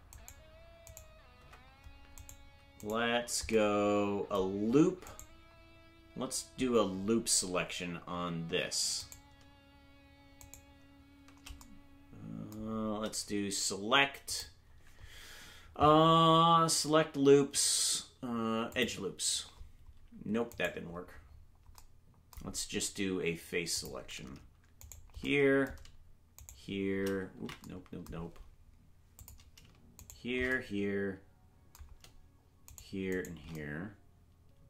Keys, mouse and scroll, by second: 0.2 right click, 1.0 right click, 1.4 Tab, 2.2 right click, 3.5 right click, 5.1 right click, 10.4-11.6 shift+right drag, 14.3-18.8 drag, 21.3 right click, 21.3-21.8 scroll up 3, 23.8 click, 24.8 right click, 26.4 shift+right click, 27.4 ctrl+z, 29.2 click, 30.0 shift+right click, 32.7 shift+right click, 33.5 shift+right click.